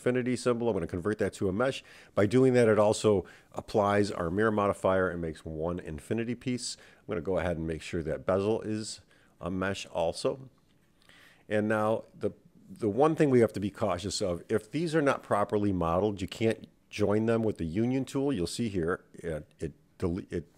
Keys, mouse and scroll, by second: 0.9-3.1 middle drag, 3.3 click, 6.7 click, 8.5 click, 9.0-10.2 right drag, 10.7 click, 11.5 click, 12.5 Tab, 13.2 Tab, 13.8 click, 15.2 shift+click, 16.9 click, 18.5 super+z, 19.1 click, 19.9 click.